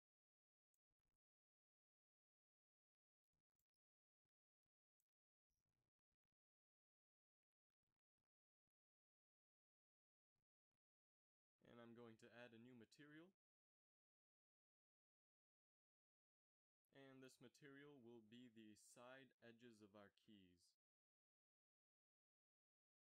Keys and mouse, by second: 0.2 z, 0.3 z, 17.4 shift+z.